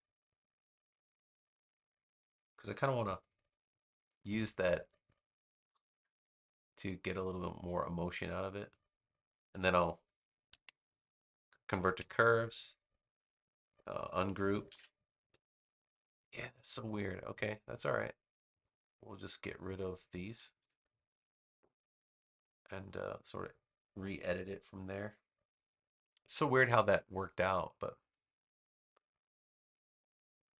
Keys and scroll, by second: 10.5 super+Return, 11.9 a, 14.6 shift+super+g, 20.5 BackSpace.